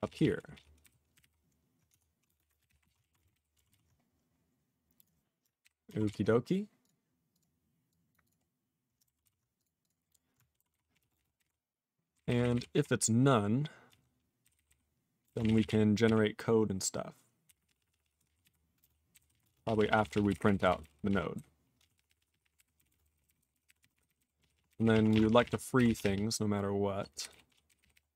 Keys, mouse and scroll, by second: 0.3 ctrl+p, 0.5 ctrl+p, 0.8 ctrl+n, 1.1 ctrl+o, 1.2 ctrl+y, 1.9 Tab, 2.1-3.3 typing, 3.3 ctrl+n, 3.7 ctrl+s, 4.1 scroll down 6, 5.0 click, 5.0 click, 5.6 ctrl+k, 6.1 ctrl+s, 6.8 click, 6.8 click, 7.3 click, 7.4 click, 7.9 click, 8.1 click, 8.2 click, 8.3 click, 8.4 scroll down 2, 9.2 ctrl+s, 9.5 click, 9.6 click, 9.8 click, 9.8 click, 10.7 ctrl+s, 10.9 ctrl+p, 11.0 ctrl+a, 11.1 ctrl+space, 11.2 ctrl+n, 11.3 ctrl+g, 11.4 ctrl+e, 12.1 ctrl+n, 12.2 ctrl+n, 12.4 ctrl+n, 12.5 ctrl+n, 12.7 ctrl+p, 14.4 ctrl+n, 14.5 ctrl+n, 14.6 ctrl+n, 15.2 ctrl+n, 15.2 ctrl+n, 15.2 ctrl+space, 15.3 ctrl+n, 15.4 ctrl+n, 15.4 ctrl+e, 15.5 ctrl+n, 15.6 ctrl+e, 15.6 ctrl+n, 16.0 ctrl+e, 17.5 ctrl+w, 17.5-18.0 ctrl+p, 18.1 ctrl+p, 18.2 ctrl+e, 18.4 ctrl+y, 18.8 ctrl+space, 19.1 ctrl+g, 19.2 ctrl+n, 19.3 ctrl+e, 19.4 ctrl+space, 19.5 ctrl+a, 19.5-20.0 ctrl+p, 20.1 ctrl+p, 20.2 ctrl+w, 20.3 ctrl+n, 20.4 ctrl+n, 20.5 ctrl+n, 20.7 ctrl+n, 20.8 ctrl+n, 21.1 ctrl+p, 21.3 ctrl+y, 21.8 ctrl+a, 21.8-22.4 ctrl+p, 22.5 ctrl+o, 22.7 ctrl+n, 22.9 ctrl+space, 22.9 ctrl+n, 23.0 ctrl+n, 23.1 ctrl+n, 23.2 ctrl+n, 23.4 ctrl+n, 23.5 ctrl+n, 23.6 Tab, 23.8 ctrl+n, 23.9 ctrl+n, 24.0 ctrl+n, 24.2 ctrl+n, 24.4 ctrl+p, 24.5 ctrl+p, 24.7 ctrl+n, 24.8 ctrl+n, 24.9 ctrl+e, 25.1 ctrl+space, 25.1 ctrl+a, 25.1 ctrl+p, 25.3 ctrl+p, 25.3 ctrl+g, 25.4 ctrl+p, 25.8 ctrl+k, 25.8 ctrl+p, 26.0 ctrl+p, 26.1-26.9 ctrl+p, 27.1 ctrl+n, 27.3 ctrl+n, 27.5 ctrl+p, 27.7 ctrl+n, 27.8 ctrl+k, 27.9 ctrl+k.